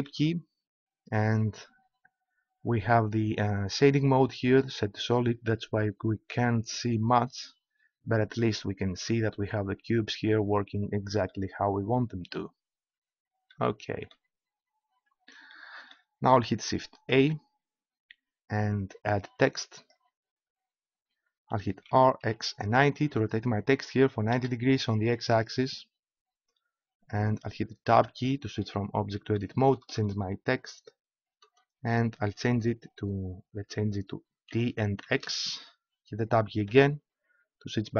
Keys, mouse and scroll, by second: 7.4-8.4 scroll up 1, 17.2 shift+a, 21.9 r, 27.9 Tab, 29.4 BackSpace, 29.6 BackSpace, 29.9 BackSpace, 30.1 BackSpace, 31.4 BackSpace, 34.5 shift+t, 35.0 shift+x, 36.6 Tab.